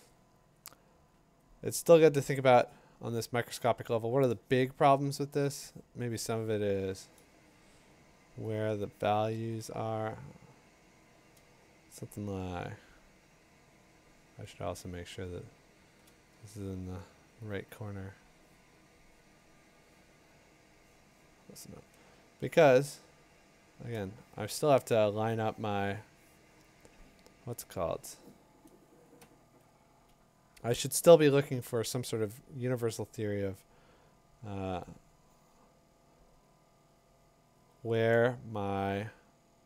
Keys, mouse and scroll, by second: 2.0 click, 4.1 click, 8.6 click, 13.4-14.2 scroll, 15.4-15.8 click, 15.5 click, 15.8 click, 15.9 click, 16.0 click, 17.6 click, 19.6 click, 23.8 click, 31.2 ctrl+click, 34.8 click, 36.4 click.